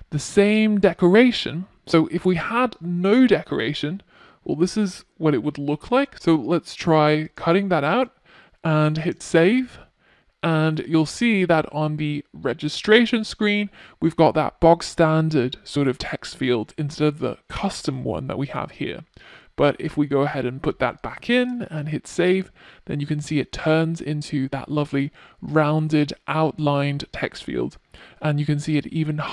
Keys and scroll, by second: 2.8 super+z, 4.7 super+x, 5.5 super+x, 5.8 super+s, 16.2 super+z, 18.0 super+z, 18.2 super+s.